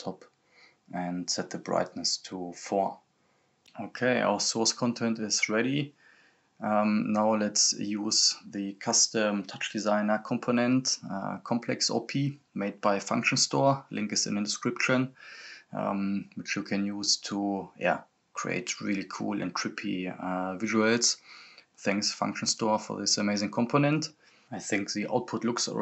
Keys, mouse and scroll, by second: 2.5-3.4 scroll down 1, 3.4-5.1 drag, 6.0-6.6 scroll down 1, 6.6 click, 8.6-12.3 drag, 12.3-12.7 scroll down 1, 12.7-15.3 drag, 16.1 scroll up 1, 17.7-18.5 scroll down 1, 18.5 click, 19.5 scroll up 1, 21.8-22.5 scroll down 1, 22.5-23.0 scroll up 1, 23.0 click.